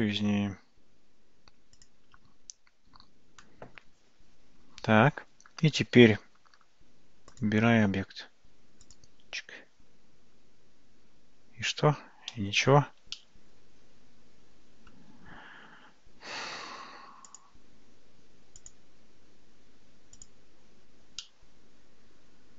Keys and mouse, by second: 12.7 shift+z, 13.2-14.9 middle drag, 18.7 click, 21.3-22.5 middle drag.